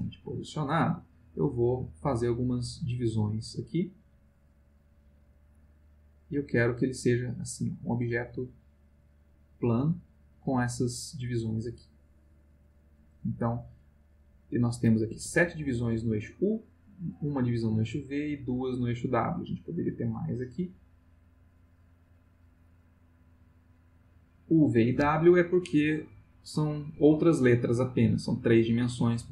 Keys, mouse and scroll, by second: 1.4 click, 1.9 click, 2.3 click, 2.8 click, 3.3 click, 4.8 click, 6.2-10.7 middle drag, 14.4 click, 15.1 Escape, 18.5-21.4 drag, 23.3-24.8 middle drag.